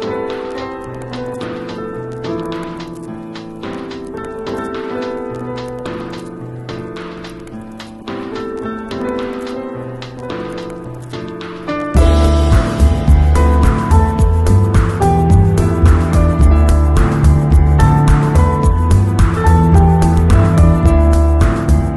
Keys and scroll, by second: 2.3 space, 4.4 space, 5.6 space, 6.4 z, 7.7 v, 18.6 super+i, 20.2 z, 21.2 space.